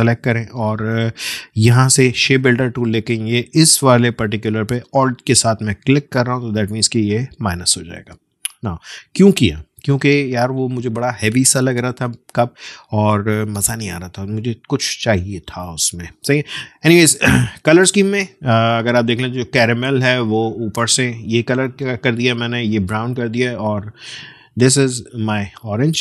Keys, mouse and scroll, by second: 9.3-11.5 alt+scroll down 1, 18.7 alt+scroll down 1, 18.8 alt+scroll up 1, 25.7 space, 25.9 click.